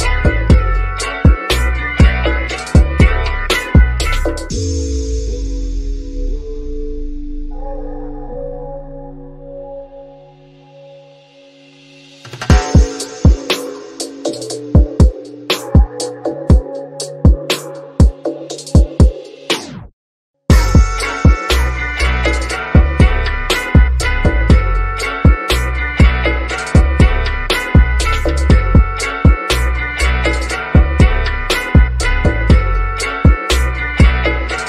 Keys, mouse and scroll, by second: 1.0 click, 2.2 ctrl+a, 4.0 click, 7.4 scroll down 1, 8.8 shift+middle click, 9.4-9.9 scroll up 1, 10.4 shift+click, 14.1 space, 16.0 click, 17.6 space, 18.0 click, 21.1 space, 21.4 click, 24.8 space, 25.9-26.8 scroll down 1, 26.8 click, 28.8-29.9 scroll down 1, 30.0-33.2 shift+middle drag, 33.2 ctrl+l.